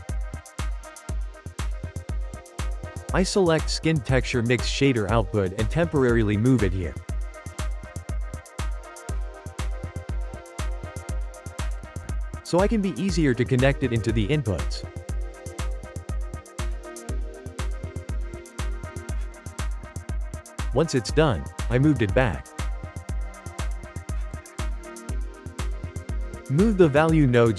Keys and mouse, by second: 0.8-4.8 ctrl+middle drag, 4.8 click, 5.4 g, 6.9 shift+middle click, 7.4 g, 10.9-12.1 shift+middle drag, 12.1 click, 13.7 click, 14.5 ctrl+shift+middle click, 15.3 click, 16.5 ctrl+middle click, 17.3 click, 18.9 ctrl+shift+middle click, 19.6 g, 21.6-24.6 shift+middle drag, 24.6 click, 24.9 ctrl+middle click, 25.8 g, 26.8 shift+middle click, 27.1 g.